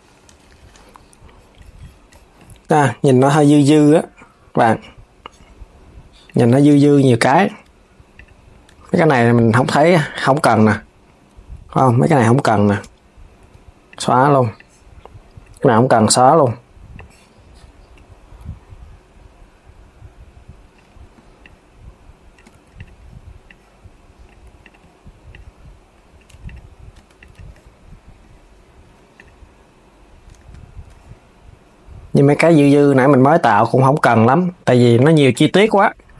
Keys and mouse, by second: 3.0 click, 3.5 g, 6.5 z, 7.8 click, 8.4 Tab, 10.1 click, 13.1 x, 14.2 click, 15.6 x, 16.6 click, 21.1 shift+click, 22.2 x, 23.1 click, 24.4 x, 25.0 click, 26.8 click, 28.8 click, 30.1 Tab, 35.0 click, 35.3 l.